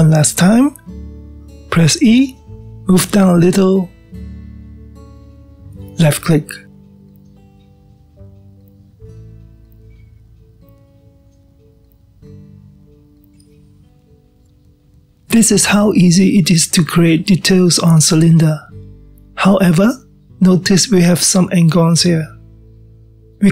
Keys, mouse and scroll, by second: 2.1 e, 7.0-7.8 scroll down 2, 7.8-8.4 scroll down 1, 8.4-13.0 middle drag, 13.0 click, 17.0-18.0 middle drag, 18.0-18.5 scroll down 1, 18.5-20.1 middle drag, 20.1-21.7 scroll up 3, 21.7 click, 23.4 click.